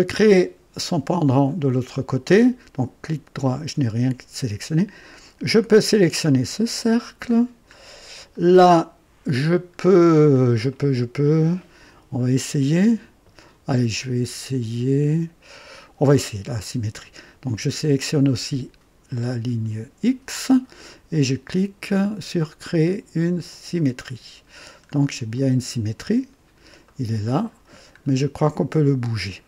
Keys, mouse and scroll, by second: 0.2 scroll up 2, 0.7-1.3 right drag, 2.3 right click, 3.3 click, 5.2-6.8 drag, 7.3 scroll down 1, 8.3-9.7 right drag, 9.8-10.1 scroll down 1, 10.7-14.2 right drag, 19.2 click, 23.4 click, 24.5 scroll down 1, 25.3-26.0 right drag, 26.2 scroll up 2, 26.8 right click, 28.0-28.4 scroll up 2.